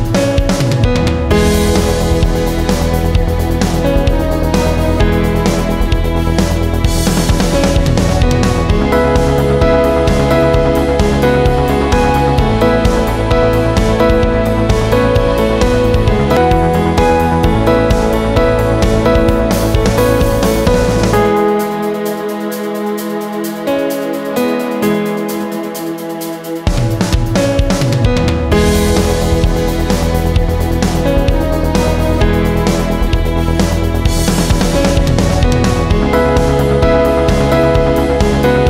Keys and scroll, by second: 0.0 ctrl+t, 7.8 Return, 10.9 Right, 11.2 Right, 11.4 Right, 11.7 Down, 11.8 Down, 18.2-19.8 typing, 32.1 ctrl+z, 32.7-33.1 ], 33.2 ], 33.4 ], 33.7 ].